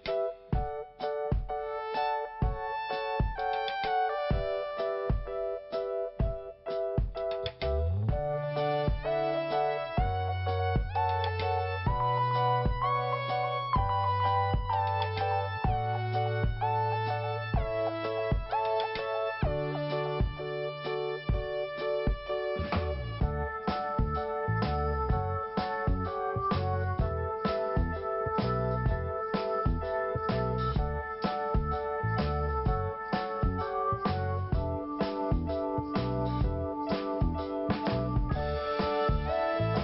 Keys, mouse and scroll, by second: 0.4 click, 2.3 click, 2.4 click, 2.9 click, 5.0 click, 5.1 click, 5.5 click, 7.1 click, 7.1 click, 7.7 click, 10.6 click, 11.2 click, 12.8 click, 12.8 click, 13.4 click, 14.0 click, 15.2 click, 15.7 click, 17.6 scroll down 1, 20.2 click, 21.2 p, 22.5 click, 26.9 scroll down 1, 27.4 scroll up 1, 28.5 click, 33.8 click, 33.9 click, 34.4 click, 34.5 click, 35.4 click, 38.5 scroll down 1, 39.5 click.